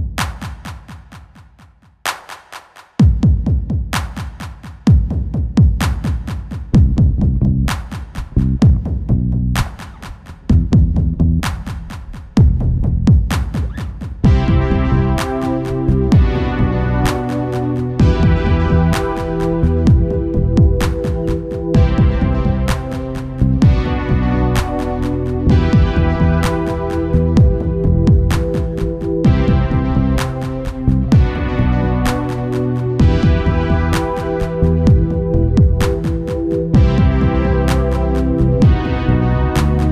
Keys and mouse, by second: 1.8-3.5 drag, 5.2 middle click, 5.8 z, 6.9-8.7 drag, 8.8-12.9 drag, 18.1 ctrl+s, 20.3-22.8 drag, 27.4-28.8 right drag, 28.8-30.5 drag, 29.5-34.4 middle drag, 29.5-32.6 right drag, 30.8-32.4 drag, 32.9-36.5 drag, 32.9-34.4 right drag, 36.6-38.4 drag, 38.1 right click, 38.4 middle click, 38.8-39.9 drag.